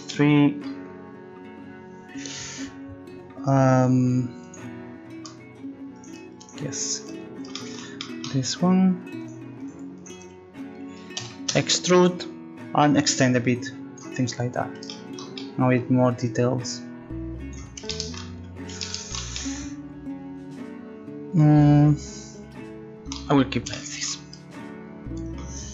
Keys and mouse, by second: 4.4-5.9 drag, 11.2 e, 12.9-14.6 drag, 16.5-17.5 drag, 18.4 middle click.